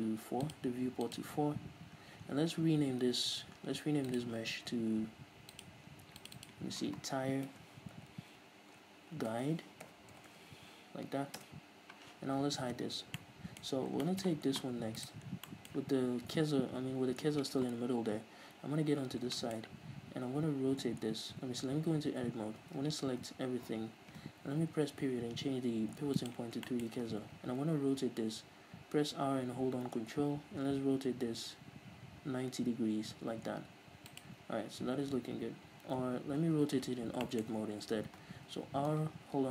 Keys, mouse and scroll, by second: 0.5-2.0 drag, 2.0-4.3 scroll up 1, 4.3 click, 4.8 scroll down 1, 5.0-5.6 scroll up 1, 5.6-13.3 drag, 11.5 Return, 13.1 h, 13.3-15.1 middle drag, 13.8-14.1 scroll up 2, 15.1 right click, 15.4 scroll down 2, 15.6-34.3 middle drag, 18.5 KP_3, 21.8 Tab, 22.7 a, 24.9 ., 27.3 r, 34.3 ctrl+click, 36.1 ctrl+z, 36.5 Tab, 37.3-39.5 shift+middle drag, 38.6 r.